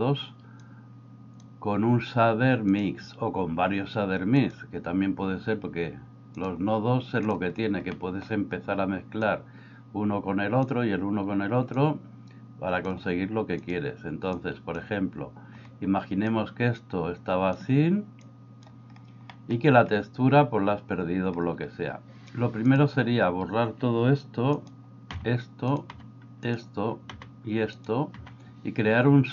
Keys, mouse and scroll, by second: 0.8 click, 2.7-7.3 drag, 8.0 middle click, 9.3-10.8 drag, 11.9-12.9 drag, 16.3-17.6 drag, 18.3 click, 19.5 middle drag, 25.2 x, 25.9 x, 26.4 click, 27.1 x, 27.8 click, 28.2 x.